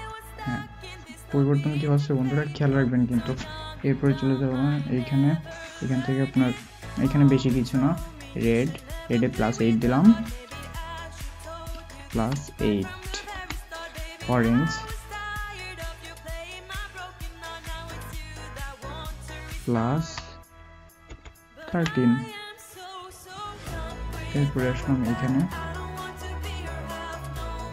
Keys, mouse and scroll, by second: 12.1 typing, 13.3 typing, 19.9 typing, 27.2 typing.